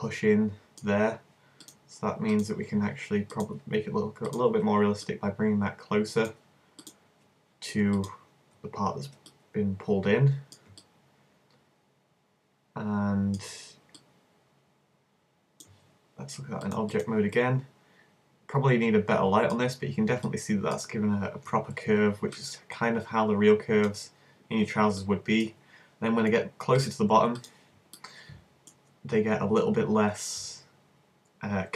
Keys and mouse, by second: 2.6 click, 3.3-6.4 middle drag, 6.8 click, 6.9-10.5 middle drag, 10.8 click, 11.2-12.8 middle drag, 14.1-16.0 drag, 17.0 click, 17.4-19.1 middle drag, 27.6 click, 28.0-31.2 middle drag.